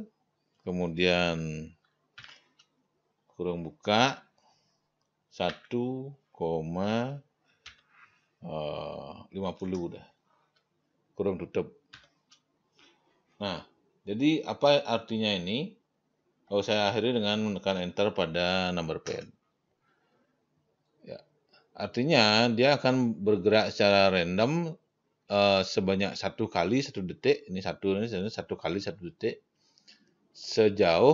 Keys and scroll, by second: 2.6 shift+9, 5.9 1, 9.7-10.5 typing, 12.4 shift+0, 19.5 Return.